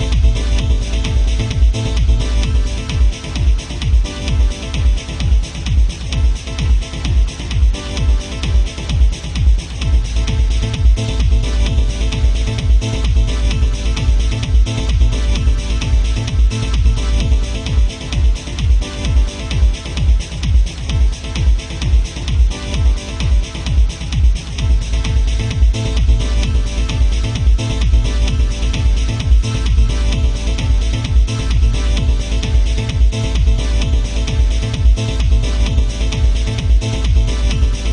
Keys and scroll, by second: 2.8 ctrl+z, 8.5 ctrl+z, 18.6 ctrl+z, 27.8 ctrl+z, 31.1 ctrl+z.